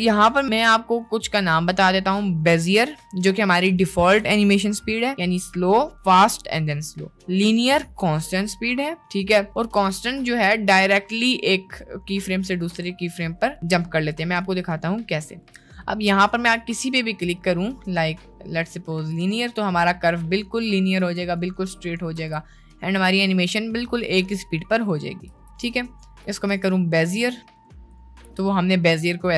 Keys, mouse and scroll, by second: 21.2-21.6 drag, 22.2 space, 25.4 space, 25.8-26.3 drag, 26.5 t, 27.6 t.